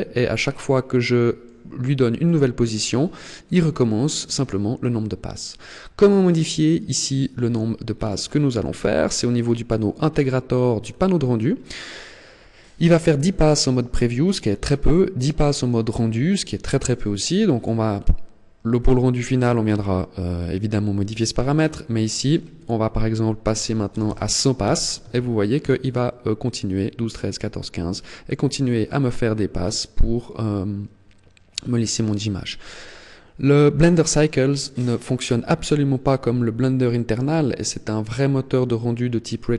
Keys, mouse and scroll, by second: 1.5 middle click, 2.4-3.1 scroll up 3, 7.0-9.0 scroll down 13, 9.0 click, 10.5-11.9 scroll down 8, 17.3 click, 27.7-28.1 scroll up 3.